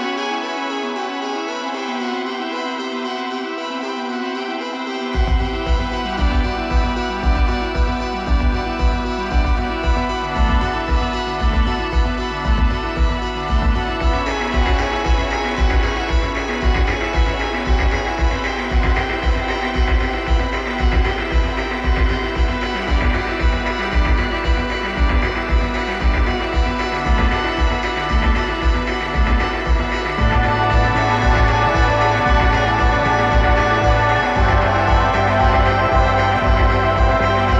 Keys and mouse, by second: 10.1-11.4 drag, 11.1 right click, 11.9-12.9 drag, 15.4 g, 27.7-29.3 drag, 31.4-33.3 middle drag, 35.3 middle click.